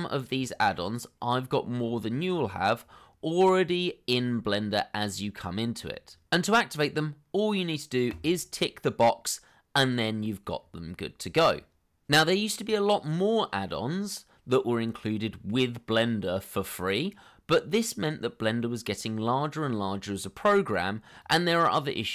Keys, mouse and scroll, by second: 0.2 scroll down 1, 6.7 scroll up 1, 9.9 scroll up 1.